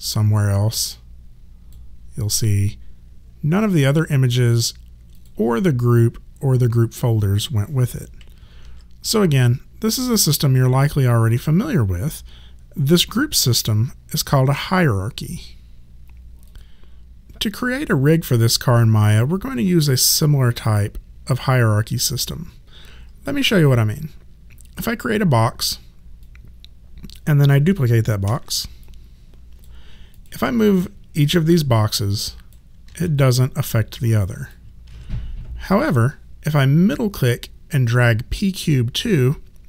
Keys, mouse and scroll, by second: 5.1 click, 8.6 ctrl+z, 8.8 click, 16.5 click, 24.7 click, 28.2 ctrl+d, 28.8 click, 32.9 ctrl+z, 33.2 click, 34.9 ctrl+z, 37.9 middle click.